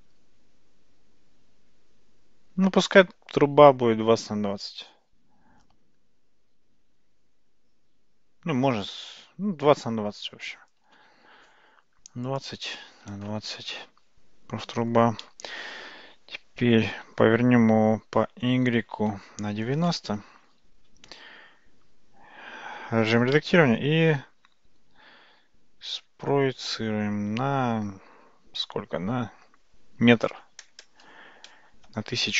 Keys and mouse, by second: 12.4-13.8 drag, 16.8 r, 22.1 Tab, 23.3 e.